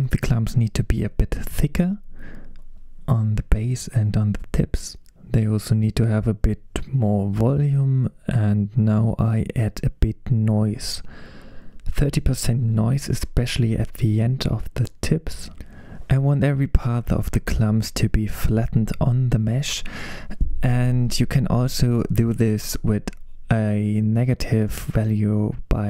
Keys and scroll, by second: 4.6 super+z, 5.0 super+z, 12.3-14.4 typing, 14.4 Return, 18.8 typing, 19.1 Return, 22.8-24.5 typing.